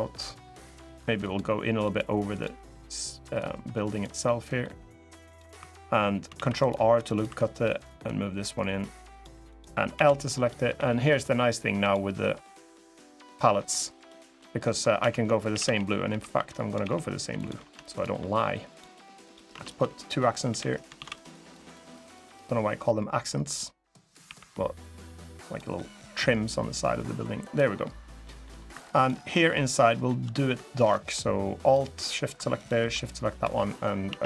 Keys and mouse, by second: 0.9 click, 1.6 click, 2.0 click, 3.2 click, 4.0 middle click, 5.0 click, 5.3 2, 6.1 ctrl+r, 6.8 click, 7.0 2, 7.8-8.9 drag, 9.3 click, 9.7 l, 10.5 g, 11.5 click, 13.4 click, 13.7 middle click, 14.4 middle click, 14.7-16.5 typing, 17.1 click, 17.3 Tab, 17.7 click, 17.9 middle drag, 18.4 click, 19.3 Tab, 19.5 click, 20.2 l, 20.7 shift+d, 20.9-23.3 drag, 24.0 l, 24.7 click, 25.5 middle click, 26.5 click, 27.5 middle click, 28.2 middle click, 28.4 3, 28.9 middle click, 29.6 middle click, 31.4 alt+shift+click, 32.3 shift+click, 33.1 g, 33.8 a, 34.1 g.